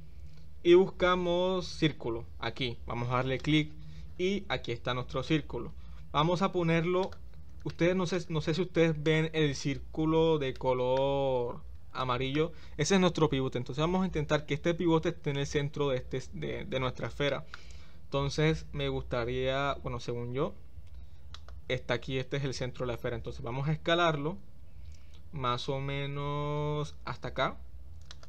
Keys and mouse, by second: 5.1 g, 7.7-8.1 middle drag, 10.5 shift+middle click, 12.1 shift+middle click, 17.4 shift+middle click, 18.5 g, 23.9 s.